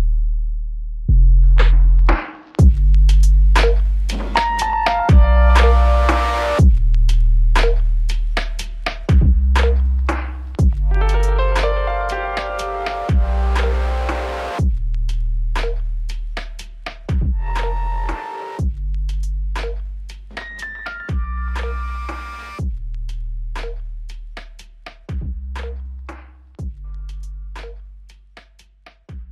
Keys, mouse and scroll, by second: 5.9 ctrl+alt+click, 7.2 alt+click, 10.6 alt+click, 19.4 double click, 22.9 alt+click, 25.6 double click.